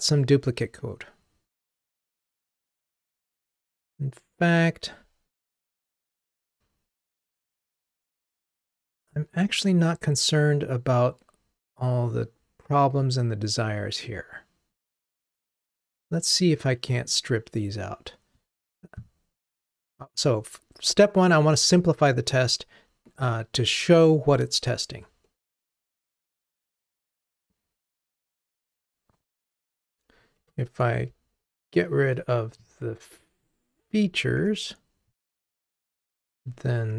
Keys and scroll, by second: 31.9 super+BackSpace.